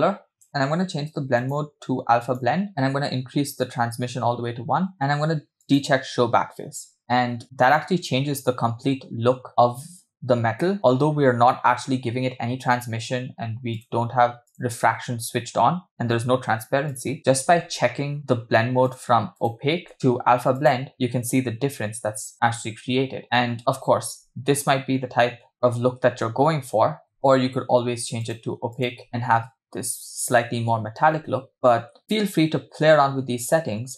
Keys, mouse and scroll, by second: 0.5 click, 1.4-2.7 drag, 2.7-3.5 scroll up 3, 3.5-4.9 drag, 4.9-5.8 scroll down 4, 5.9 click, 11.2-12.0 scroll up 1, 12.0-13.7 scroll up 1, 13.7 click, 14.5 click, 16.9 click, 17.2-18.7 scroll down 6, 18.9-19.7 drag, 19.9-20.9 drag, 23.5 space, 24.6 space, 26.5 space, 27.2-27.5 scroll down 2, 28.3-29.0 drag, 31.5 space, 32.0 space, 33.6 space.